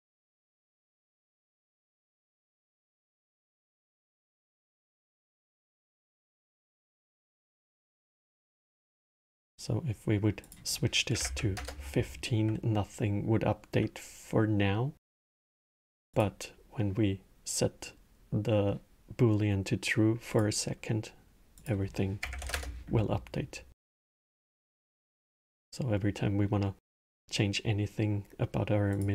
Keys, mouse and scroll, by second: 1.1-4.3 drag, 5.3-10.1 middle drag, 10.1-13.3 drag, 15.8 click, 20.0 click, 21.3-24.7 drag, 25.0 click, 26.0-28.6 middle drag, 28.6 drag.